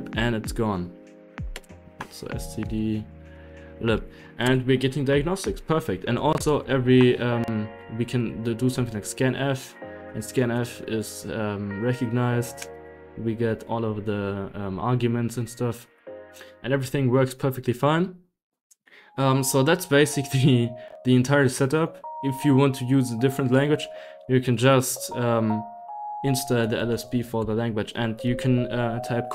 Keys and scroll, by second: 0.0-6.3 typing, 7.6-9.0 typing, 10.1-10.8 typing, 12.3-14.5 typing, 14.4 Right, 14.5 Left, 14.8 Left, 15.5 Left, 15.8-17.8 typing, 24.9 Escape, 25.8 Escape, 26.2-27.8 typing.